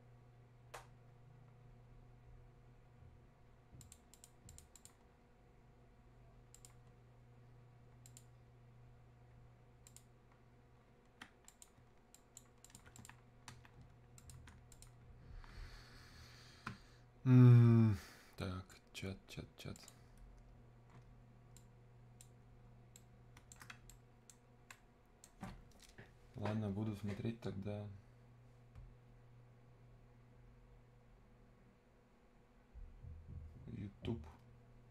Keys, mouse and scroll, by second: 3.8 ctrl+click, 12.8 ctrl+Escape, 14.2 click, 20.3-23.0 drag, 23.0-27.7 right drag.